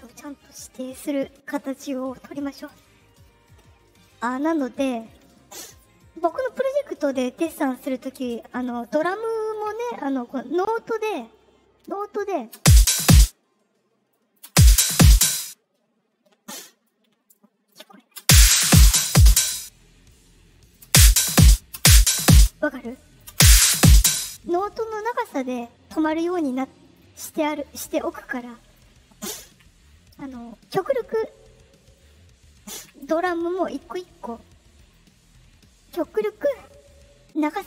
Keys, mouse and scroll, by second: 2.5 click, 4.3 right click, 4.9 right click, 5.1 right click, 9.7 middle click, 11.1 click, 12.5 space, 13.0 space, 14.0 click, 14.4 space, 15.2 space, 16.8 click, 18.1 space, 19.3 space, 20.0 click, 20.8-24.1 typing, 22.8 click, 25.4-28.7 drag, 31.5 middle click, 32.9 middle click, 32.9 scroll up 2, 34.7 click.